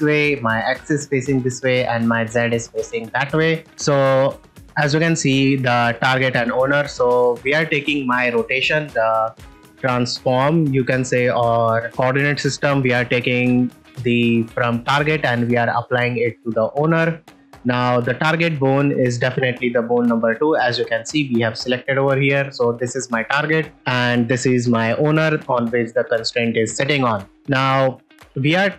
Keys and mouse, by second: 3.5 middle click, 3.6 click, 6.7 ctrl+middle drag, 7.1 middle click.